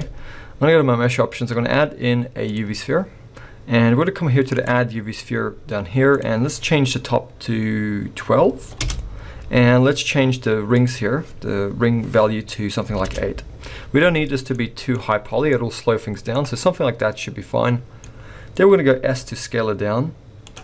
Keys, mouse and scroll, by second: 4.6 click, 6.1 click, 10.7 click, 14.5 middle click, 15.5 middle click, 16.6 middle click, 19.1 s.